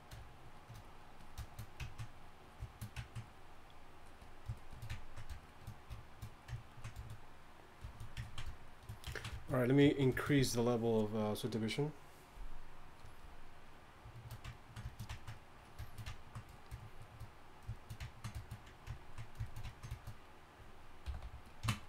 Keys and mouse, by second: 18.1 middle click, 19.3-20.0 middle drag, 21.2 g, 21.5 f.